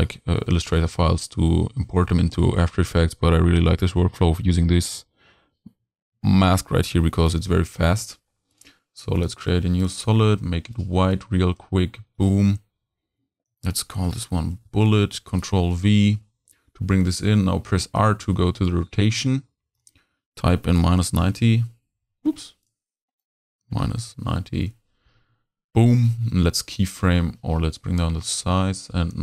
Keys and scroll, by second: 14.0 shift+b, 14.1 shift+u, 14.5 e, 14.5 t, 14.8 Return, 15.4 super+v, 16.8 r, 21.3 Return, 24.2 0, 24.5 Return, 26.2 p, 27.4 s.